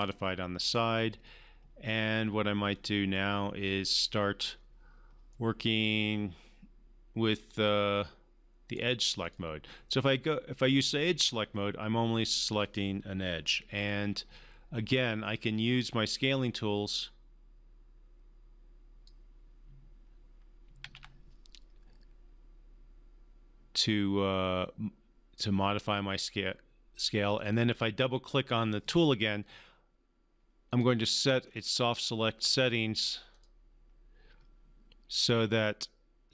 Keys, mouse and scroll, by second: 2.8-4.6 drag, 5.3-9.0 right drag, 9.2-11.0 drag, 13.7 e, 14.2 r, 15.5-19.3 drag, 20.8 ctrl+z, 27.4 click, 30.7 click, 31.4-32.1 scroll down 1, 32.4-36.3 drag.